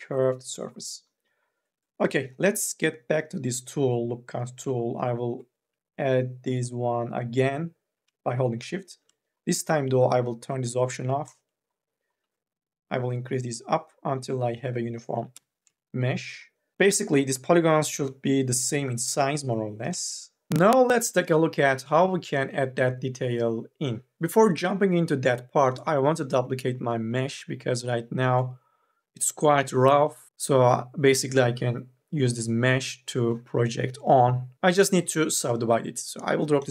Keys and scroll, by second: 15.0 3, 15.2 e.